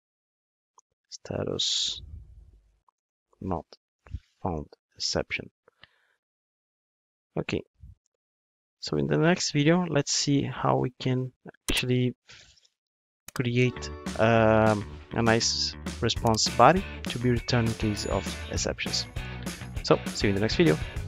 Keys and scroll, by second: 5.8 super+c, 7.5 super+v.